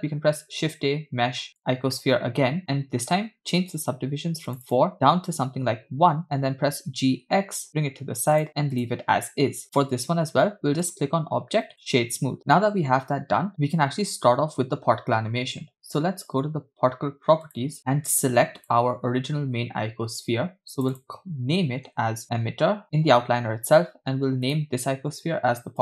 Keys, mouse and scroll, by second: 0.1 shift+a, 2.6 click, 4.5 click, 5.4 click, 6.6 g, 8.8 click, 10.9-12.1 drag, 17.5 click, 18.7 click, 20.7 click, 22.0 shift+click, 24.5 click.